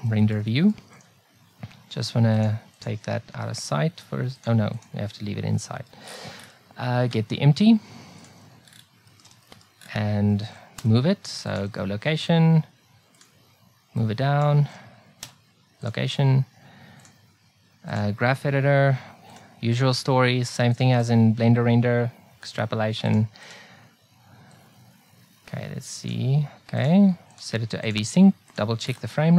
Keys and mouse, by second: 4.3-9.8 drag, 11.5 i, 15.8 i.